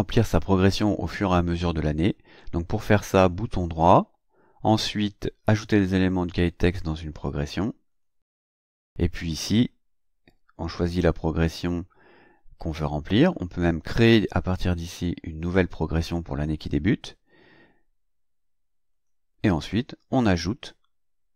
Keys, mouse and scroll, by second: 3.3 right click, 7.9 click, 9.5 click, 18.9 click.